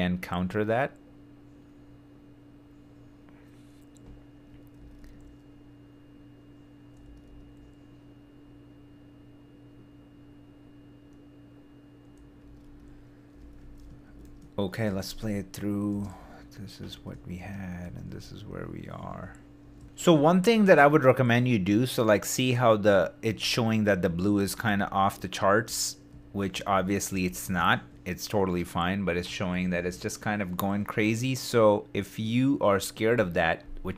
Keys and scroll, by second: 4.8 super+d, 7.0 super+d, 12.4 super+d, 13.8 shift+super+d, 14.8 shift+space.